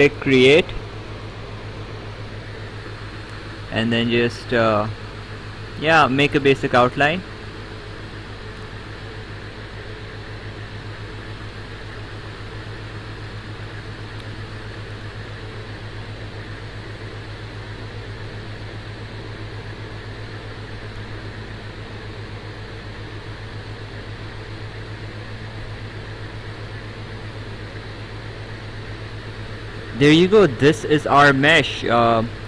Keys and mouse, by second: 1.8 click, 5.8 click, 9.0 click, 10.9 click, 12.4 click, 13.9 click, 15.7 click, 19.0 click, 20.1 click, 21.8 click, 22.8 click, 24.5 click, 26.9 click, 28.4 click.